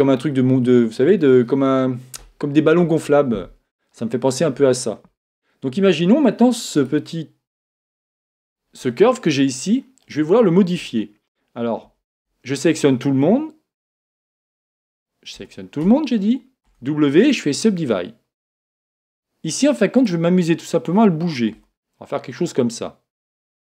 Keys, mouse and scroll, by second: 2.8-3.9 scroll up 1, 3.9-4.9 scroll down 1, 4.9-5.3 scroll down 1, 5.3-7.0 middle drag, 6.8 right click, 7.6-10.8 middle drag, 10.8 Tab, 11.8 a, 12.2 a, 14.0 right click, 15.3 a, 15.8 a, 16.6 w, 18.0-21.5 middle drag, 18.0-19.0 scroll up 1, 20.0 right click, 21.5 g, 23.3 click.